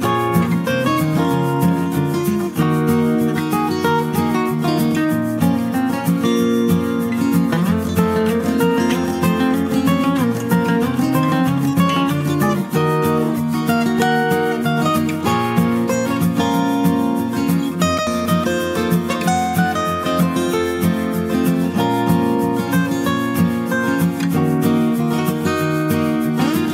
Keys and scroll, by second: 6.4 ctrl+z.